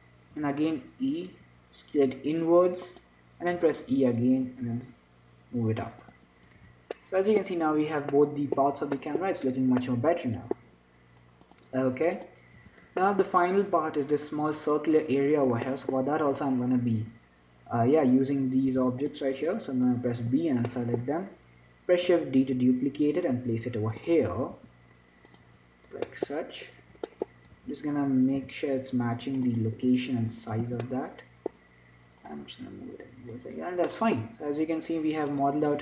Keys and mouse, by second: 0.6 e, 1.6 s, 3.8 e, 6.4 Tab, 6.9 z, 7.3-11.7 middle drag, 12.5-14.2 drag, 13.3 z, 15.9 middle click, 16.4-18.1 drag, 18.1 a, 19.0 b, 21.0-24.3 drag, 24.3 shift+d, 24.8 s, 25.7 z, 26.4-27.8 middle drag, 27.8 z, 28.1-29.7 middle drag, 28.7 g, 30.7 middle click, 30.9 z, 32.6-34.3 drag, 34.3-35.8 middle drag.